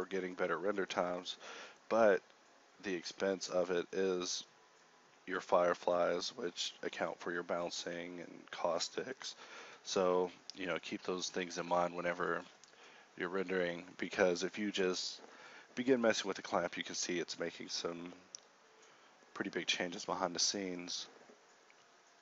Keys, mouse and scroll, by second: 8.7 z, 8.7 z, 9.1 z, 9.6 z, 15.7 z, 15.7 a.